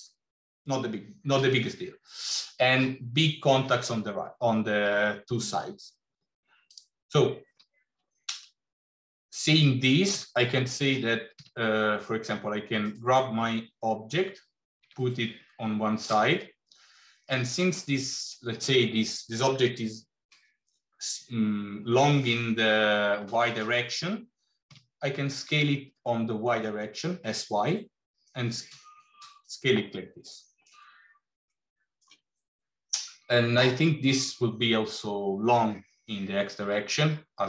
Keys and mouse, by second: 6.6 click, 10.0 g, 14.0 g, 24.6 s, 31.4 shift+middle click, 36.7-37.4 middle drag.